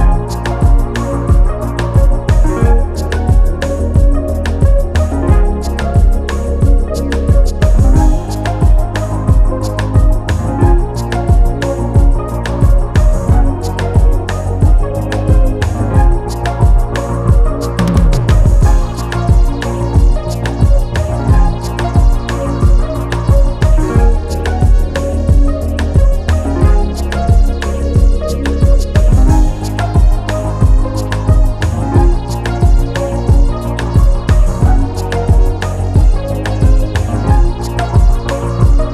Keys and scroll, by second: 25.8 ctrl+g, 32.8 ctrl+t.